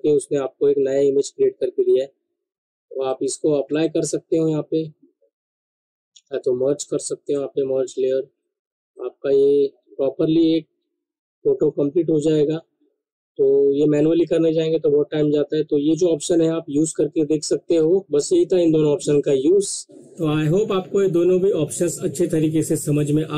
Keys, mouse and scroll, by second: 0.3 alt+scroll up 1, 3.0 ctrl+click, 3.7 right click, 7.2 click, 9.3 alt+scroll down 1, 10.4 alt+scroll up 1, 11.0 alt+scroll down 1, 11.2 alt+scroll up 1.